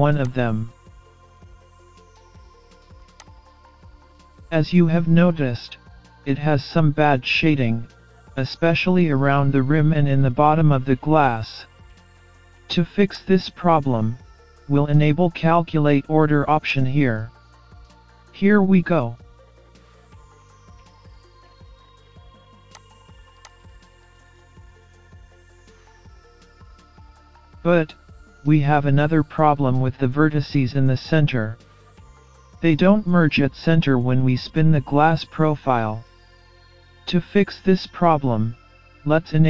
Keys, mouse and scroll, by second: 4.1 scroll up 2, 4.6 middle click, 6.8 middle click, 13.2 click, 16.7 click, 17.4 scroll down 2, 17.8 scroll up 2, 17.9 middle click, 20.5-21.0 scroll down 5, 21.0-21.8 scroll up 3, 21.4 middle click, 21.8-22.8 scroll down 1, 22.8 click, 23.5 click, 24.3 middle click, 25.2-25.6 scroll down 3, 25.6-26.0 scroll up 3, 26.0 middle click, 26.7-27.6 scroll up 5, 28.4 scroll down 3, 29.0 scroll up 3.